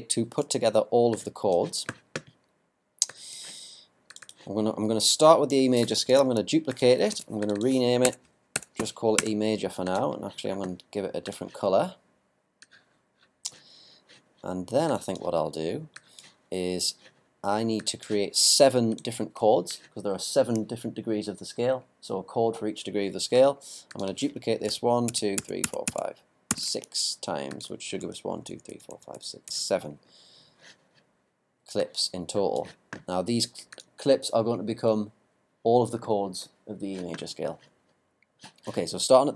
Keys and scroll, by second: 6.1 super+d, 7.1 super+r, 8.0 super+BackSpace, 24.7 super+d.